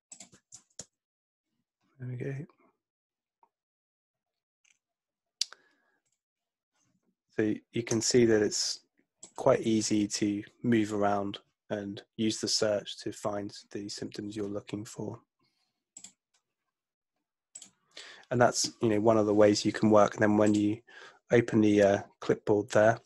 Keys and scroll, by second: 0.8 Return.